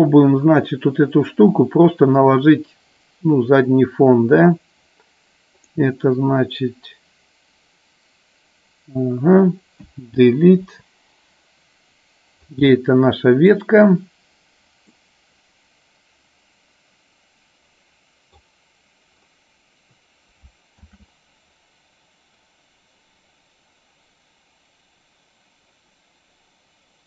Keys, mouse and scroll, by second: 5.5 click, 10.7 Delete, 12.8-13.7 middle drag, 14.9-18.4 middle drag, 20.8 shift+a.